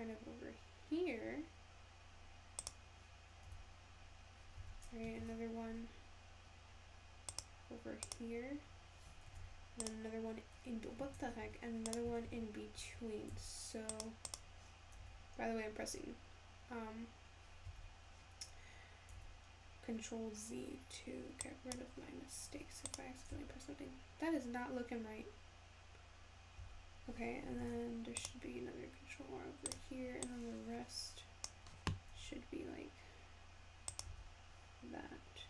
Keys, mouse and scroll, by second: 3.5 s, 5.3 ctrl+r, 9.3 ctrl+r, 12.3 ctrl+z, 13.3 ctrl+r, 15.0 s, 19.2 s, 22.9 click, 23.4 Tab, 26.6 Tab, 27.6 ctrl+r, 30.3 click, 32.2 s, 34.1 Tab.